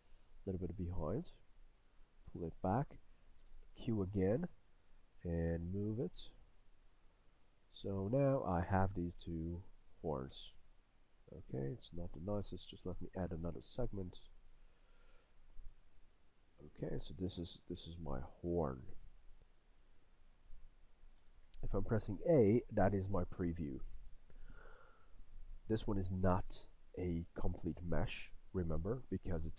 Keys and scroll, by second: 3.5 q, 5.2 w, 12.7 q, 14.3 w, 21.2 a.